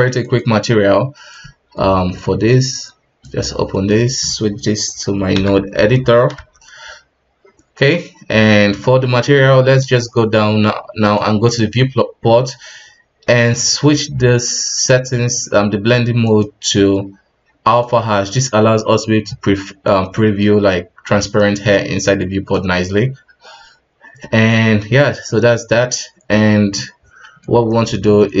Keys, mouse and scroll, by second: 19.2-19.7 middle drag, 19.7-20.1 scroll up 1, 20.1-28.4 middle drag.